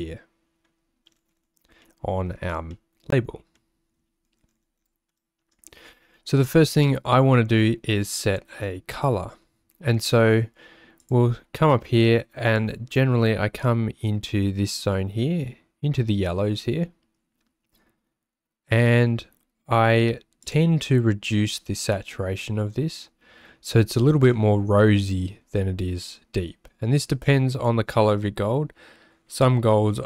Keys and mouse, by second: 1.8 middle click, 2.6 middle click, 3.7 middle click, 5.1 middle click, 5.2 click, 20.5 click.